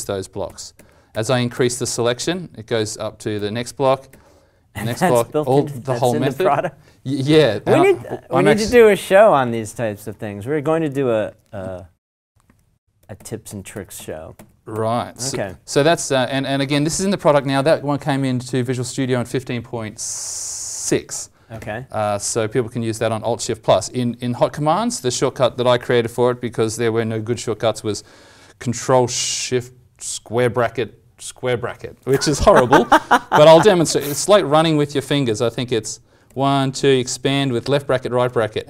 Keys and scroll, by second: 0.4 alt+shift+=, 1.1 alt+shift+=, 1.5 alt+shift+=, 2.2 alt+shift+=, 3.3 alt+shift+=, 9.5 alt+shift+=, 13.1 alt+shift+-, 13.4 alt+shift+-, 13.7 alt+shift+-, 13.9 alt+shift+-, 14.3 alt+shift+-, 14.7 alt+shift+-, 35.7 ctrl+shift+[, 35.7 ctrl+shift+], 36.2 ctrl+shift+[, 36.6 ctrl+shift+[, 36.6 ctrl+shift+], 37.2 ctrl+shift+].